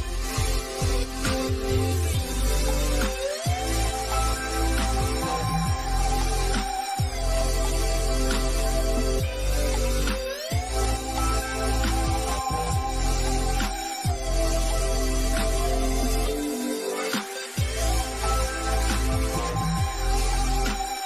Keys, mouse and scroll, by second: 0.8 scroll up 1, 3.4 scroll down 1, 6.5 click, 9.2 click, 10.3 scroll down 1, 13.1 click, 14.9-15.3 scroll down 1, 15.4 middle click, 16.1-17.2 scroll down 1, 17.5 click.